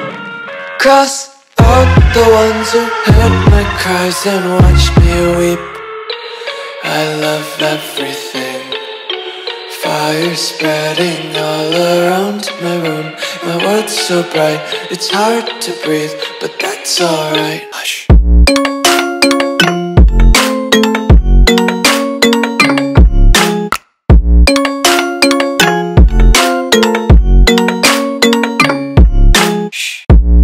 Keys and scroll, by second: 0.0 super+space, 0.1 super+space, 0.2 super+space, 2.5 Tab, 6.0 Tab, 6.4 space, 6.9 alt+super+space, 7.0 alt+super+space, 7.1 alt+super+space, 7.6 alt+super+space, 10.7 Tab, 11.2 space, 11.7 super+space, 11.9 super+space, 11.9 super+space, 12.0 super+space, 12.1 super+space, 12.2 super+space, 13.4 space, 16.1 alt+super+space, 16.2 alt+super+space, 16.2 alt+super+space, 16.3 alt+super+space, 16.5 alt+super+space, 16.6 alt+super+space, 16.7 alt+super+space, 17.2 alt+super+space, 24.5 alt+super+space, 24.6 alt+super+space, 24.7 alt+super+space, 24.8 alt+super+space, 24.9 alt+super+space, 25.0 alt+super+space, 25.2-27.5 alt+super+space, 25.7-26.1 typing, 26.2 super+space, 26.2 super+space, 26.4 super+space, 26.6-27.5 super+space, 27.5 space, 28.0 alt+super+space, 28.1 alt+super+space, 28.2 alt+super+space, 28.4 alt+super+space, 28.4 alt+super+space.